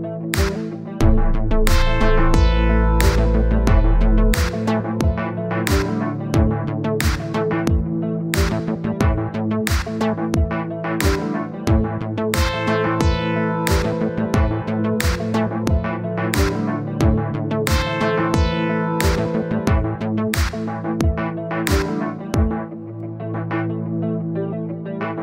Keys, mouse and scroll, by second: 9.1 scroll down 1, 9.3-9.7 scroll up 2, 9.7 click, 10.5 middle click, 10.9-11.7 scroll up 2, 11.7 scroll down 1, 11.9 middle click, 12.3 KP_1, 12.7-13.4 scroll up 3, 15.3 click, 16.2 click, 16.7-18.0 drag, 18.2-25.2 drag.